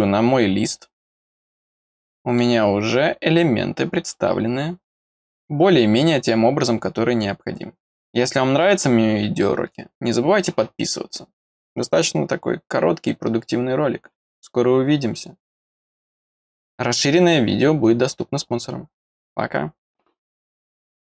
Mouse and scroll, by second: 0.4 scroll down 1, 1.2-1.7 scroll up 2, 1.7 middle click.